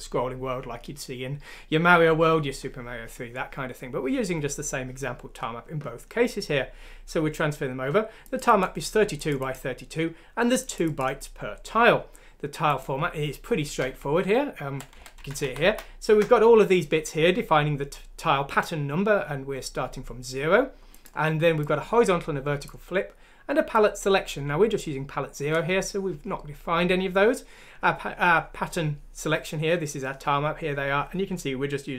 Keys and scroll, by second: 14.0 Left, 14.5 Left, 14.7 Left, 14.8 Left, 14.9 Left, 15.2-16.1 Left, 15.4 Right, 15.6 Right.